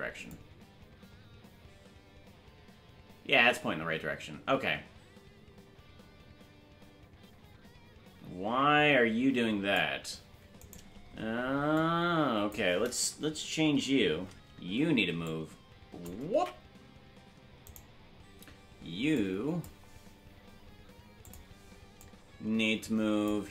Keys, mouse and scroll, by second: 0.3-9.7 drag, 11.7 click, 11.7 right click, 13.6 Left, 15.2 shift+click, 16.9 ctrl+z, 17.7 right click, 19.1 click, 21.2 click, 22.0 click.